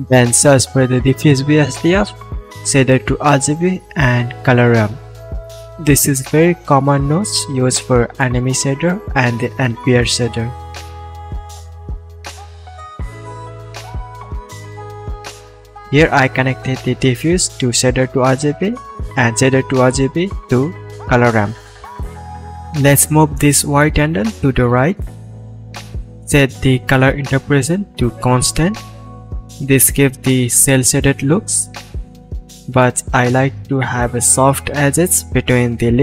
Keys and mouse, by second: 1.7 shift+a, 5.0 Down, 7.2 shift+a, 7.3-13.0 middle drag, 13.0-16.5 drag, 16.7-24.1 middle drag, 19.9 KP_Decimal, 24.1-36.0 drag.